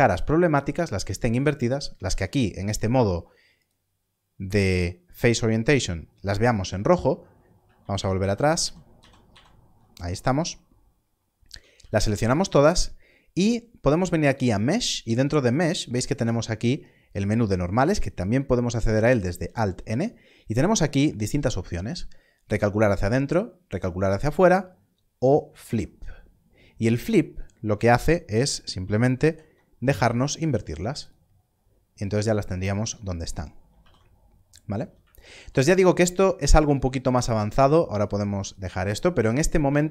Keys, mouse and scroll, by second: 2.0 alt+a, 3.6 click, 6.5 a, 7.7 ctrl+z, 8.1 ctrl+z, 8.9 ctrl+z, 9.2 ctrl+z, 11.4 a, 11.7 a, 12.0 a, 14.2 a, 28.7 click, 29.2 alt+n, 31.0 click, 32.2 alt+a, 32.7 Tab, 33.7 alt+a, 34.4 scroll down 1, 37.1 click, 39.3 scroll down 1.